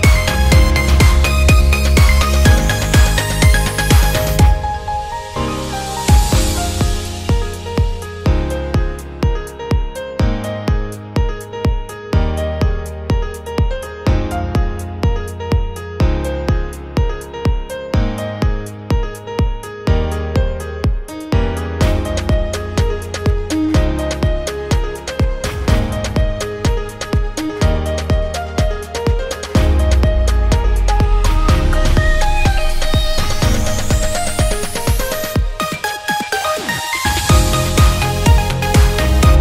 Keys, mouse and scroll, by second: 0.4 click, 1.2 click, 2.4-3.5 drag, 5.0 ctrl+click, 5.6 KP_0, 6.7 click, 7.9 click, 8.3 s, 11.6 click, 12.4 click, 13.1-14.7 drag, 15.6 click, 15.8 s, 16.3 click, 17.5 click, 19.1 i, 20.1 i, 21.7 click, 26.0-27.9 drag, 28.1 i, 28.8 click, 30.2-31.9 drag, 32.0-33.6 drag, 33.8 click, 35.0 i, 35.6 click, 36.1 space, 37.0 click, 37.6 s, 38.2 click, 38.6 g.